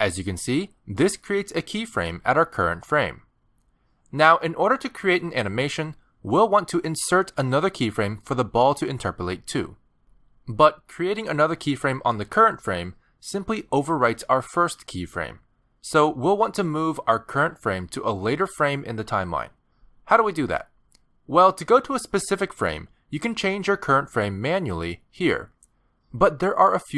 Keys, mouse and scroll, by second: 1.2 middle click, 14.5 g, 15.9 g, 17.1 g, 24.5 click, 25.4 click.